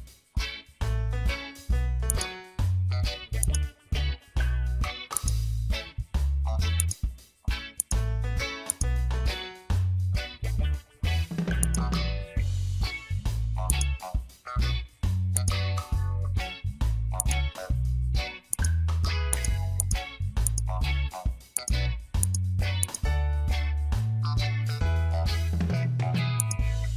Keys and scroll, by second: 23.8 ctrl+d.